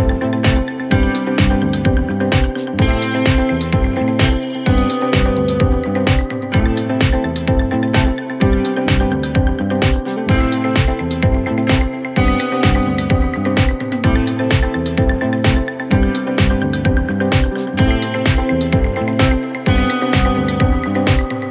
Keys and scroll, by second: 5.3 shift+F2, 5.9 Left, 7.0 F3, 7.9 shift+F2, 8.3 Escape, 13.4 c, 13.6 e.